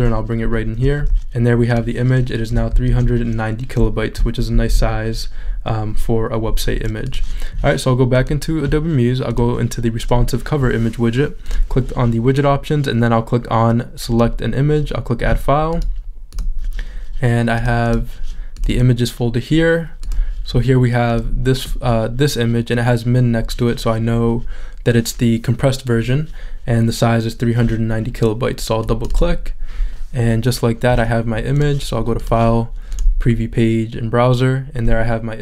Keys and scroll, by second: 2.8 shift+super+z, 4.7 shift+super+z.